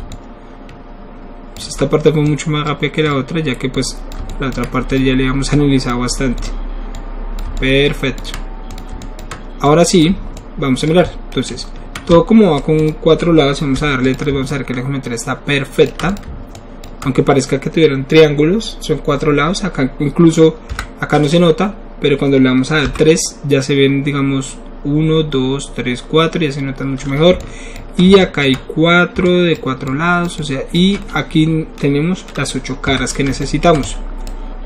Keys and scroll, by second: 13.7 3, 20.8 1, 23.5 3, 32.9 1.